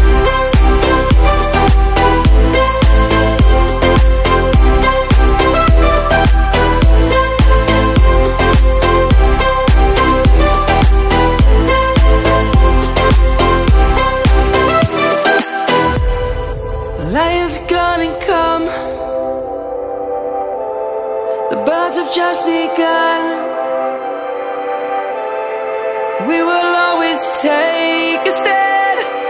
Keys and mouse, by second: 1.1 click, 1.3 Tab, 3.6 click, 5.1 Tab, 5.5 click, 9.5 Tab, 10.8 click, 13.8 Tab, 16.2 Tab, 16.4 click, 20.9 ctrl+z, 22.2 click, 23.7 Tab, 24.4 click, 24.6 Tab, 27.8 Tab, 28.4 click, 29.0 Tab.